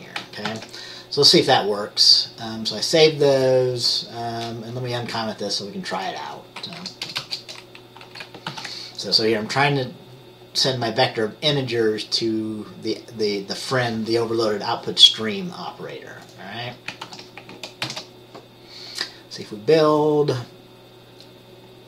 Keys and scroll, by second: 0.6 ctrl+s, 6.9 Right, 7.2 BackSpace, 7.3 BackSpace, 8.1 Right, 8.6 ctrl+s, 17.2 ctrl+s, 17.9 ctrl+b.